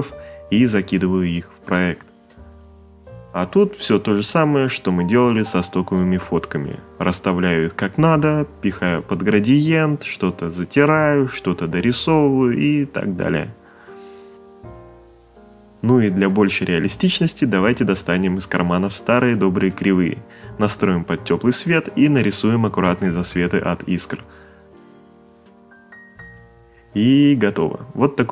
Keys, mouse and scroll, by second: 0.5 click, 2.5 Return, 3.2 Return, 3.9 Return, 4.6 click, 5.2 click, 5.3 right click, 5.5 ctrl+click, 5.8 right click, 6.0 alt+shift+click, 6.4 right click, 6.5 alt+shift+click, 6.8 space, 7.2 click, 7.4 Return, 7.6 click, 7.8 alt+click, 8.4 click, 8.8 right click, 8.9 click, 8.9-11.0 typing, 9.0 right click, 10.3 click, 10.6 click, 11.0 click, 11.6 click, 11.8 click, 12.3 x, 12.6 click, 13.3 click, 14.1 alt+shift+click, 14.2 ctrl+click, 14.4 click, 14.6 right click, 14.8 click, 15.5 click, 16.1 e, 17.9 click, 19.0 click, 19.2 click, 19.3 ctrl+z, 19.7 right click, 20.7 click, 21.0 click, 21.4 right click, 21.6 click, 21.9 click, 22.0 right click, 22.1 click, 22.2 right click, 23.2 right click, 23.2 x, 23.3 click, 23.9 ctrl+z, 24.0 right click, 24.3 space, 24.4 click, 24.5 right click, 24.8 z, 25.4 click, 25.6 click, 26.0 ctrl+z, 26.2-27.6 typing, 26.8 right click, 27.3 click.